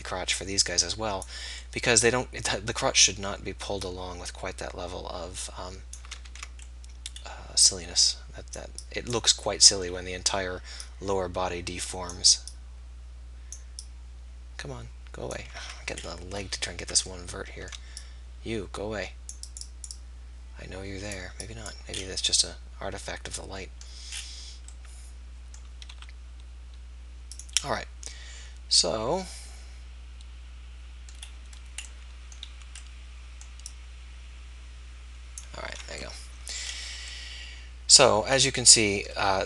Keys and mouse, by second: 6.3 ctrl+z, 7.6 click, 10.9-16.0 drag, 15.6 ctrl+z, 17.3 click, 22.0 middle click, 22.5 click, 22.7-23.7 middle drag, 23.9-25.9 middle drag, 25.9 r.